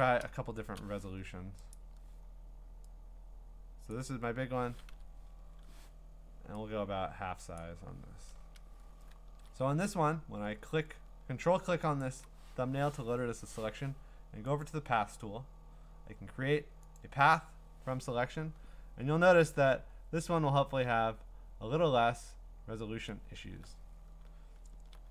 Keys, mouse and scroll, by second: 1.7 click, 3.9 click, 4.9 ctrl+t, 7.5 click, 8.3 Return, 9.2 scroll, 12.0 ctrl+click, 14.6 click, 17.0 click, 18.1-21.8 ctrl+scroll, 21.4-22.9 middle drag, 22.4-23.4 scroll, 24.6-25.1 ctrl+scroll.